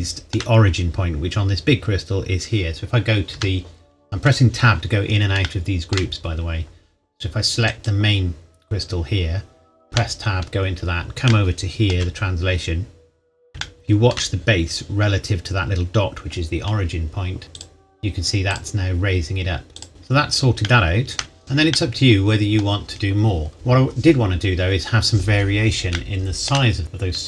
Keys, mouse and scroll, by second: 0.2 shift+middle click, 1.3-1.7 scroll up 1, 3.0-3.3 scroll down 1, 3.3 Tab, 5.4 shift+middle click, 6.2-6.8 scroll up 1, 7.7 click, 9.9 Tab, 10.7-11.2 scroll down 1, 11.3 shift+middle click, 12.1-13.5 scroll up 1, 13.6 shift+middle click, 17.6 click, 19.9-20.6 scroll down 1, 20.9 shift+middle click, 21.8 scroll down 1, 25.9-26.3 scroll up 1, 26.3 shift+middle click, 26.8-27.2 scroll up 2.